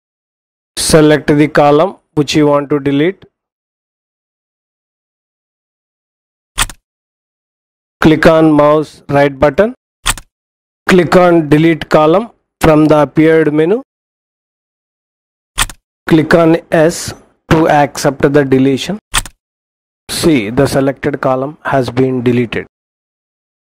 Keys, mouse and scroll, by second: 6.7 click, 9.8 right click, 14.9 click, 19.4 click.